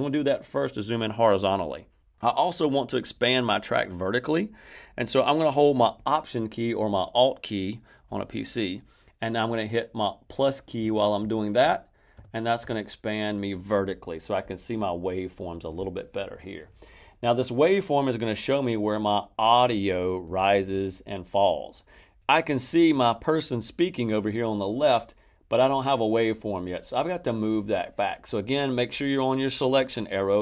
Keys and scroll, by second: 10.2 alt+=.